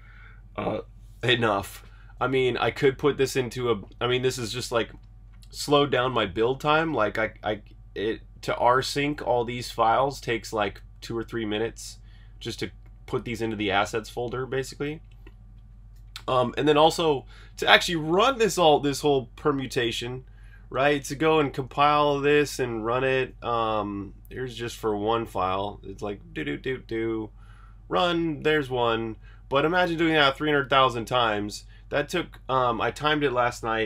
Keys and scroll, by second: 21.3 super+Tab, 23.3 super+`, 24.1 super+r, 24.3 Escape, 24.5-25.1 typing, 24.7 super+h, 25.3 super+h.